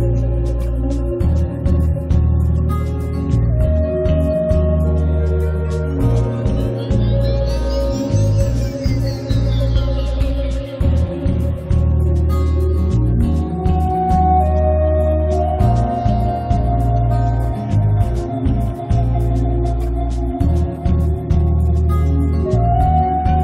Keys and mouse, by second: 1.1-4.1 middle drag, 1.1 right click, 3.7 click, 3.7 right click, 4.3 ctrl+s, 8.8 middle click, 9.5-10.6 middle drag, 10.6-11.7 drag, 11.7 middle click, 12.4 a, 13.7-16.1 middle drag, 17.4 ctrl+KP_1, 18.6 KP_3, 20.4 right click, 20.6 z, 21.5 middle click, 22.4 ctrl+alt+shift+c.